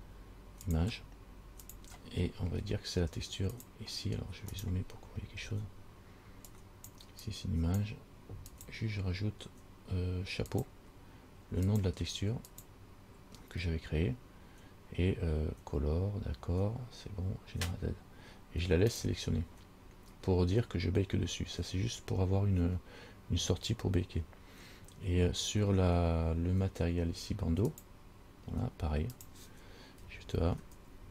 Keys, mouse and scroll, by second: 2.4-3.8 scroll up 2, 3.8 click, 5.2-5.7 scroll up 4, 6.7 click, 6.9 click, 7.4 click, 8.7 click, 11.9 click, 19.1 click, 27.9 click, 29.4 click.